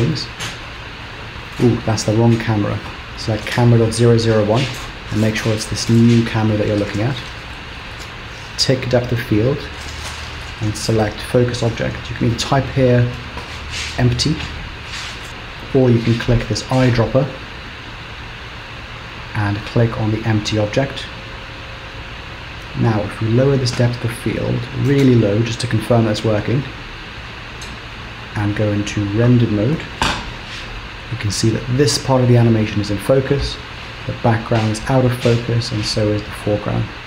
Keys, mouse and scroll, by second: 3.5 click, 8.5 click, 12.3 click, 15.3 BackSpace, 16.6 click, 22.1-23.4 scroll down 6, 23.4 click, 28.5 z.